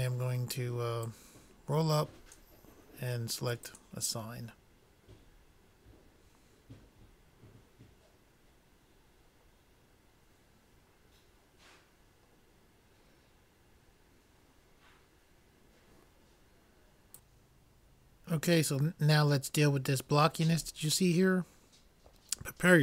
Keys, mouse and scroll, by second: 1.7-3.2 drag, 3.4 middle click, 4.2 click, 4.7-5.7 drag.